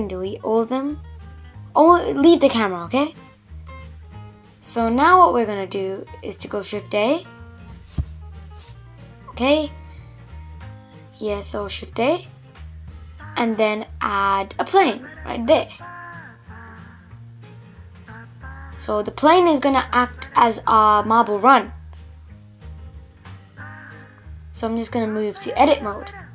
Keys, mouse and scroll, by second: 0.8 Delete, 1.9-2.4 scroll up 5, 2.4-2.8 middle drag, 2.8 scroll up 1, 3.0 scroll down 2, 3.2-3.8 middle drag, 3.8-4.4 scroll up 3, 4.4 scroll down 2, 4.6-7.5 middle drag, 7.5 shift+a, 10.2 shift+a, 16.9 scroll up 1, 17.1-20.1 middle drag, 20.4-23.6 middle drag, 23.7-26.3 drag.